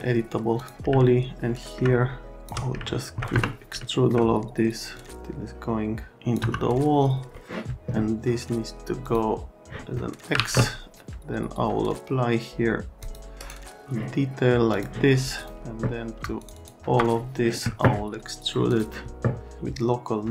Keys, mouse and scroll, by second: 0.6 click, 1.0 alt+middle click, 1.2 alt+right click, 2.3 shift+middle click, 2.8 alt+right click, 3.3 F3, 3.8 alt+right click, 4.9 middle click, 6.4 F3, 7.3 middle click, 9.0 click, 9.9 middle click, 10.3 alt+1, 13.0 click, 13.4 right click, 14.7 click, 15.4 click, 16.4 ctrl+click, 16.5 ctrl+click, 18.7 click.